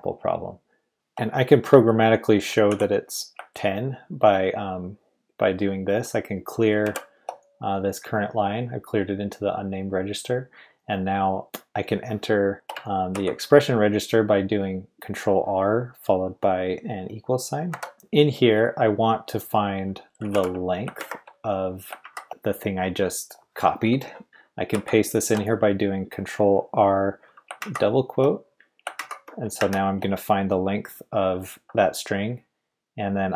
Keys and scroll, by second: 0.9-1.4 typing, 2.7 typing, 6.8 shift+4, 13.1 ctrl+r, 17.7 =, 19.8-21.0 typing, 22.0 shift+', 24.7 ctrl+r, 27.6 typing, 28.9-29.6 typing.